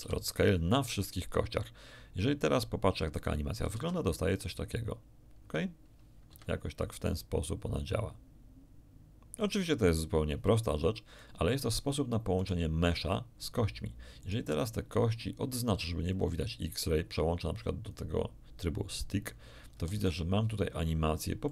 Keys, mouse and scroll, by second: 0.9 click, 3.1 click, 3.7 alt+a, 6.3 Escape, 7.0-11.3 drag, 12.3 right click, 14.2 right click, 16.1 click, 17.8 click, 19.9 alt+a, 21.4-21.5 middle drag.